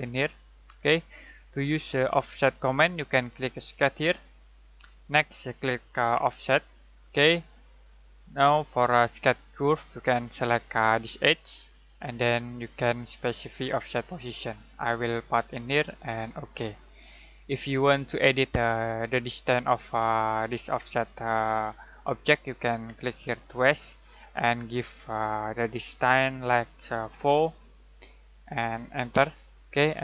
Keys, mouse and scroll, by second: 4.4 click, 11.2 click, 23.2 click, 27.4 4, 29.1 Return.